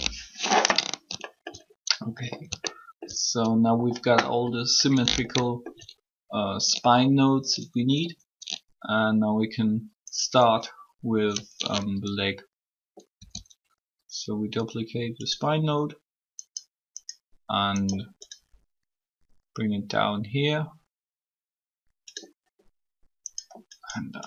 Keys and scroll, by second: 12.9 shift+d.